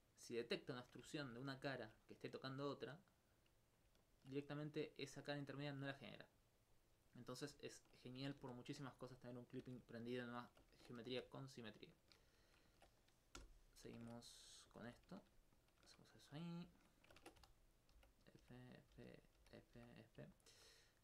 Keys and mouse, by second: 0.2 alt+click, 1.2 ctrl+alt+click, 1.7 alt+click, 2.8 e, 3.8 click, 4.1 alt+click, 4.1 alt+click, 5.2 alt+click, 5.7 alt+click, 7.1 middle click, 7.7 ctrl+alt+click, 8.4 ctrl+z, 8.9 alt+click, 9.4 middle click, 10.4 alt+click, 10.7 ctrl+Tab, 11.0 ctrl+2, 11.7 right click, 12.0 shift+right click, 14.0 shift+Tab, 14.9 right click, 15.6 shift+click, 16.5 right click, 17.8 right click, 20.4 alt+click, 20.9 right click.